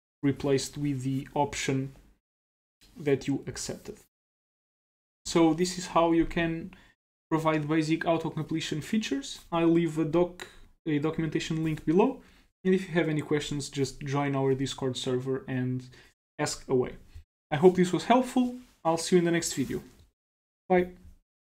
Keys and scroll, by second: 5.1 ctrl+c.